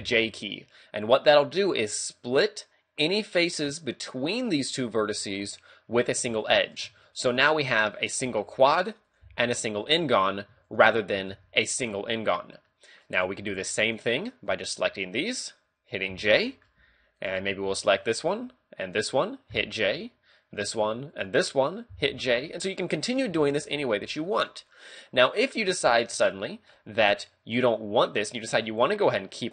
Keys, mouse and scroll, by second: 0.0 j, 0.7 middle click, 6.4 shift+middle click, 6.8 ctrl+Tab, 8.0 right click, 8.2 g, 8.7 right click, 9.1 right click, 9.3 g, 9.9 right click, 10.0 a, 10.7 shift+right click, 11.0 right click, 11.3 a, 11.6 middle click, 12.6 middle click, 13.4 ctrl+Tab, 14.5 right click, 15.3 shift+right click, 16.2 j, 16.3 middle click, 16.8 a, 17.2 right click, 17.5 scroll down 2, 17.8 middle click, 18.9 shift+right click, 19.5 j, 19.9 a, 20.4 right click, 21.1 shift+right click, 22.0 j, 22.3 a, 22.6 middle click, 24.1 shift+middle click, 24.8 middle click, 26.1 middle click.